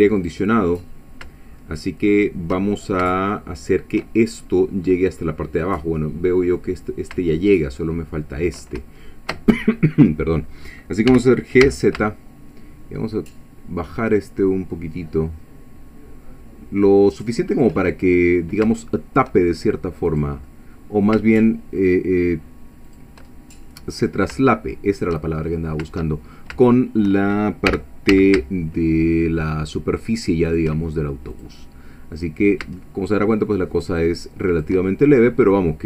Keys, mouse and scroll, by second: 0.2 click, 2.1 shift+click, 3.1-4.1 shift+middle drag, 4.4-7.3 shift+middle drag, 9.0 shift+middle click, 11.1 g, 11.6 z, 17.5 shift+click, 17.9 shift+middle click, 18.7 shift+middle click, 20.1 click, 20.5 middle click, 22.9 shift+click, 23.4 shift+scroll down 1, 23.7 shift+middle click, 24.8-25.1 shift+scroll up 2, 25.4-25.9 shift+scroll up 4, 26.2 shift+scroll down 2, 26.7 shift+middle click, 27.7 g, 28.1 z, 30.5 shift+click, 31.3 click, 31.6-33.4 middle drag, 34.5 shift+click, 34.9 shift+scroll down 1, 35.2 shift+middle click.